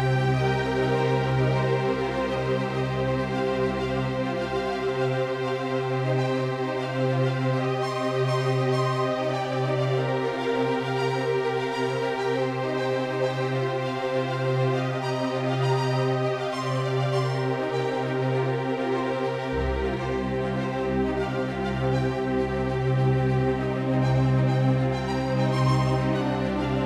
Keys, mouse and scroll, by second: 3.1-5.2 drag, 6.4 Tab, 7.8 z, 10.5-14.4 drag, 21.0-23.1 drag.